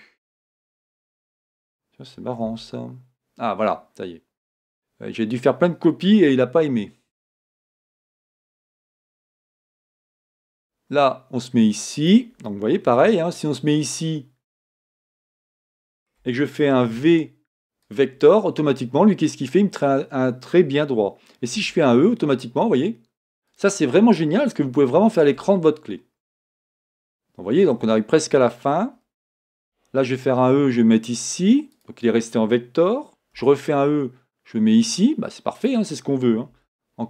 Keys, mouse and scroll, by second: 8.5-12.9 shift+middle drag, 9.9 e, 15.6-33.4 shift+middle drag, 18.0 e, 25.6-26.9 scroll down 2, 28.4-29.6 scroll up 2, 29.6 e.